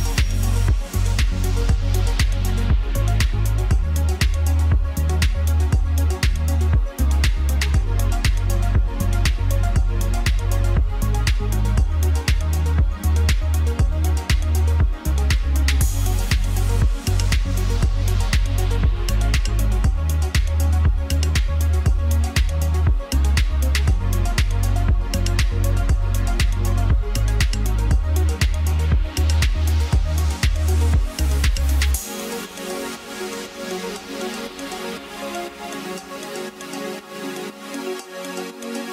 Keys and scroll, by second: 2.5 ctrl+z, 6.0 ctrl+z, 12.5 ctrl+z, 16.9 ctrl+z, 22.4 ctrl+z, 31.2 ctrl+g, 34.8 ctrl+g.